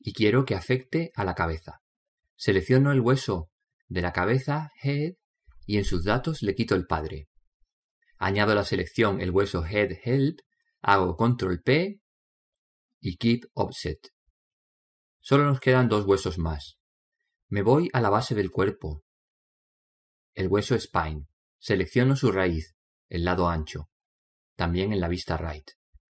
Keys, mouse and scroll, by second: 4.3 right click, 7.3 click, 10.6 right click, 11.9 ctrl+p, 17.4-21.4 middle drag, 21.4 scroll up 1, 21.6 middle click, 22.4 right click.